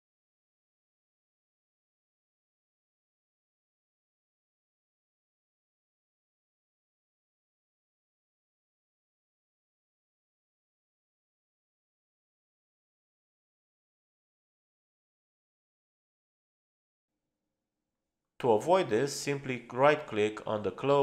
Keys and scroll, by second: 13.0 Escape, 14.3 Escape.